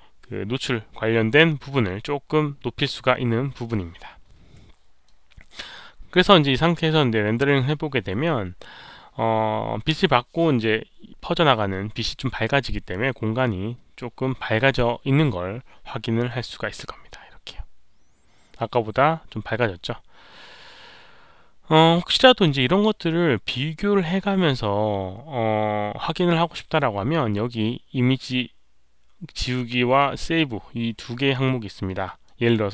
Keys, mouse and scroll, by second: 0.7 Return, 5.0-6.1 drag, 6.8 click, 15.8 click, 32.2-32.5 drag.